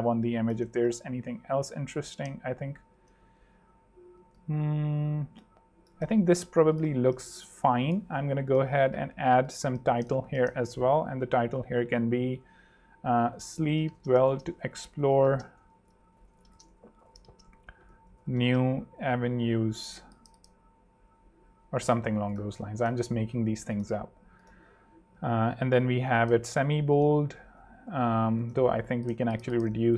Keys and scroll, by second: 0.7 shift+super+3, 1.7 super+3, 3.0 super+2, 3.4 super+z, 4.3 shift+super+z, 6.3 shift+super+Escape, 6.9 super+3, 7.8 super+2, 8.2 super+t, 8.7-10.3 typing, 13.1-20.2 typing, 22.3-23.1 typing, 25.5 alt+h, 27.9 ↺, 28.7 2, 28.9 Home, 29.3 alt+h, 29.8 alt+super+3.